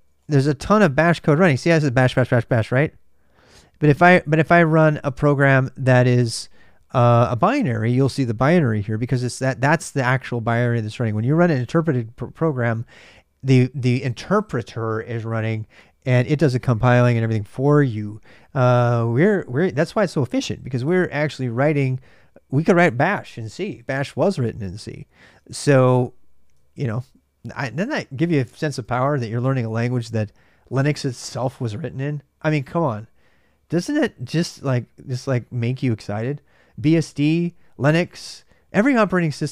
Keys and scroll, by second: 0.0-0.4 typing, 25.2 ctrl+a, 25.4 ctrl+a, 27.0-39.5 typing.